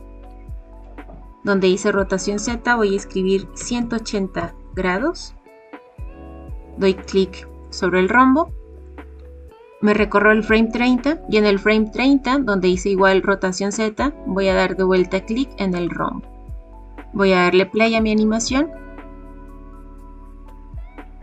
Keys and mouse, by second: 2.5-4.9 drag, 9.2-11.1 drag, 15.7 click, 17.8 click.